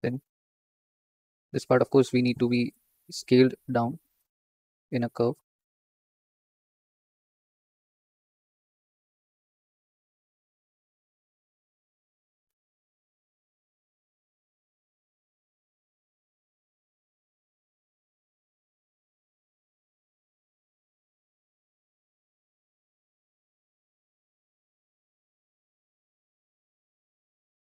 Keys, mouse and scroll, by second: 0.3 s, 2.6 ctrl+z, 3.1 s, 5.9 ctrl+click, 6.7 s, 8.2 ctrl+click, 8.8 s, 10.2 click, 11.2 s, 11.2 s, 13.1 click, 14.0 s, 15.1 click, 15.8 s, 16.9 click, 17.4 s, 18.5 click, 19.0 s, 20.5 click, 22.8 click, 24.0 s, 25.2 shift+click, 25.7 s, 27.2 click.